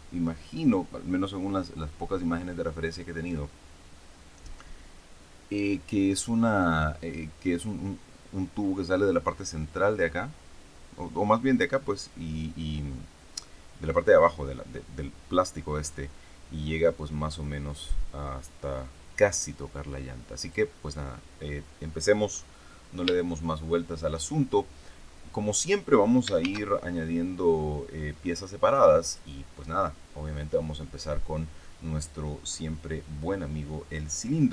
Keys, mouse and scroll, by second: 20.3 click, 22.2-22.8 scroll up 2, 22.8-23.1 scroll up 1, 23.1-24.1 shift+middle drag, 24.8-25.2 scroll down 1, 26.3 shift+a, 29.0 click.